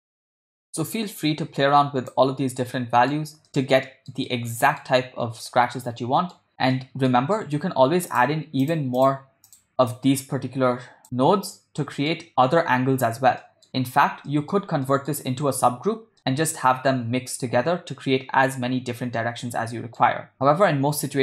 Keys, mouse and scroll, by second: 0.3 drag, 0.6 click, 0.8-2.2 drag, 2.8 ctrl+middle click, 3.5-4.3 middle drag, 4.4-4.9 middle drag, 5.8 middle click, 6.7 middle click, 7.4 middle click, 8.2 click, 9.0 click, 9.5 click, 10.0-11.0 drag, 11.0 middle drag, 11.8 middle click, 13.4 middle click, 14.3 ctrl+middle click, 14.8 middle click, 17.0 middle click, 19.8 middle click, 20.4-21.0 middle drag.